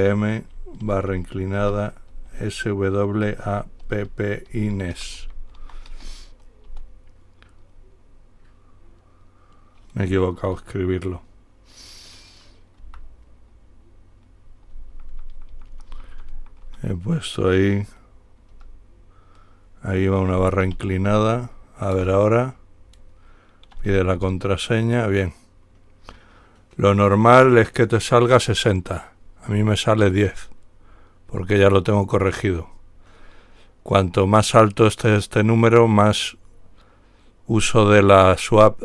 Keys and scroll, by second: 1.1-2.4 typing, 3.5-6.6 typing, 6.9 Return, 15.0-16.9 typing, 15.6 Left, 15.8 Left, 16.2 Left, 18.8 typing, 20.9 /, 22.2 Return, 24.0-24.4 typing, 26.9 typing.